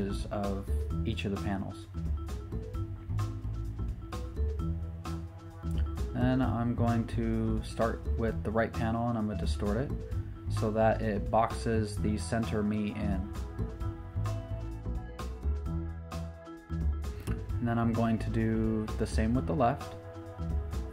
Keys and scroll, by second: 0.4-0.9 typing, 1.0 Return, 2.7 shift+l, 3.0 Return, 6.1 super+t.